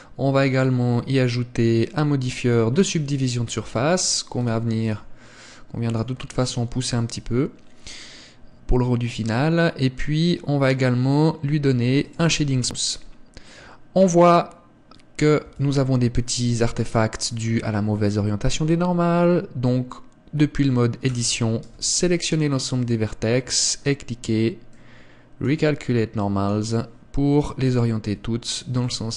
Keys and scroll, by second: 15.5 Tab, 21.2 a, 21.7 a, 28.1 Tab.